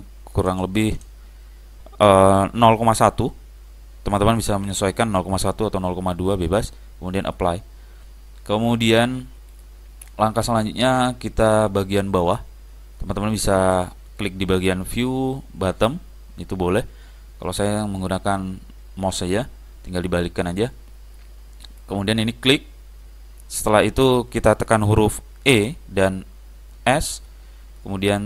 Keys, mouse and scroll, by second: 9.6 click, 10.8-12.6 middle drag, 16.6 click, 17.2-18.9 middle drag, 21.7 click, 25.6 e.